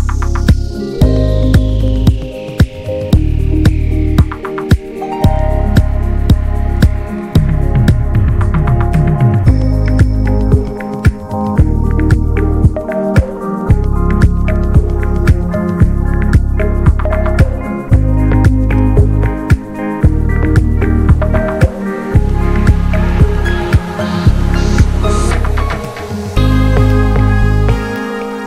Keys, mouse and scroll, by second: 0.0 scroll up 1, 0.2 ctrl+z, 3.6 scroll up 2, 4.8-5.9 drag, 5.9 ctrl+z, 7.5-9.1 drag, 9.1-9.5 scroll down 1, 9.5 scroll up 1, 10.4-12.4 drag, 12.4-12.9 scroll down 4, 12.9 scroll up 1, 13.2 shift+middle click, 14.0 scroll down 1, 14.3 middle click, 14.5-15.6 scroll up 3, 14.9 shift+middle click, 15.6 shift+middle click, 16.1-19.1 drag, 19.1 scroll down 1, 19.6 scroll up 1, 20.2 ctrl+z, 20.7 ctrl+z, 21.5-25.5 drag, 25.5-25.9 scroll down 2, 25.9-28.0 middle drag, 28.0 scroll up 1, 28.2-28.4 middle drag.